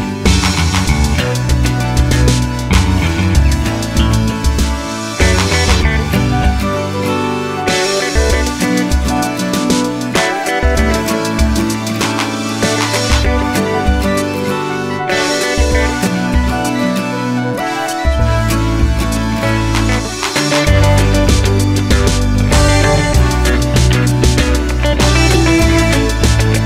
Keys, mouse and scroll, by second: 0.0 click, 0.2 g, 0.9 click, 1.1 g, 1.6 click, 2.0 click, 2.4 z, 4.3 click, 4.3-7.0 middle drag, 7.0 click, 7.2 g, 8.9-10.0 middle drag, 9.4 g, 10.0 click, 10.3 y, 11.2 click, 11.3 y, 12.3 click, 12.5 y, 13.3 click, 13.7 y, 14.3 click, 14.4-16.2 middle drag, 15.0 y, 16.2 click, 16.9 click, 17.5 h, 20.8 click, 22.0 g, 25.8 middle click, 25.9 click, 26.2 g.